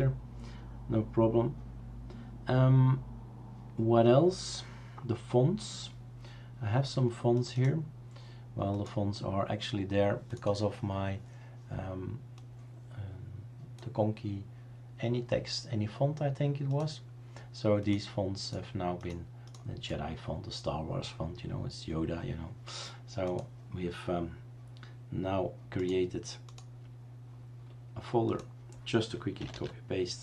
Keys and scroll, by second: 29.6 typing.